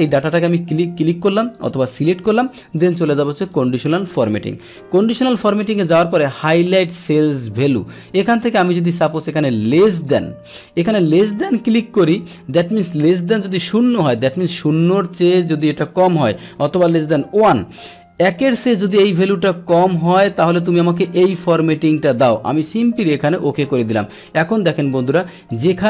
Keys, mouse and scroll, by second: 3.4 click, 10.0 click, 11.5 click, 16.4 BackSpace, 22.9 click, 23.7 click, 24.4 click, 24.8 click, 25.4 click.